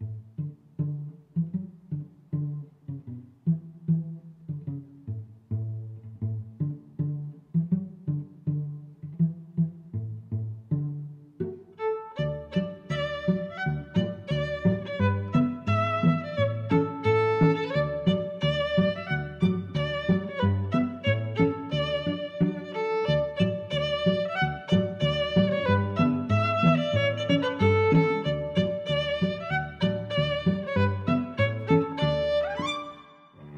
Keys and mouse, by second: 1.5 click, 2.8 click, 3.4 click, 3.9 middle click, 5.2 Tab, 5.5 middle click, 10.1 click, 12.3 click, 13.8 click, 14.2 shift+super+Tab, 15.8-17.1 typing, 19.1 click, 20.0 right click, 20.4 click, 21.4 click, 22.2 click, 22.7 0, 23.1 Tab, 23.9 0, 24.3 Tab, 25.3 Return, 26.8 click, 28.3 x, 28.9 click, 32.8 click.